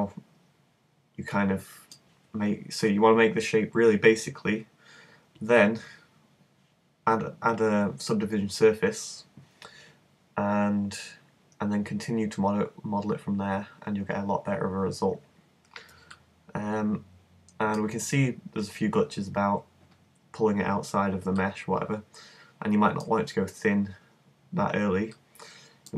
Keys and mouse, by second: 16.2-25.9 middle drag.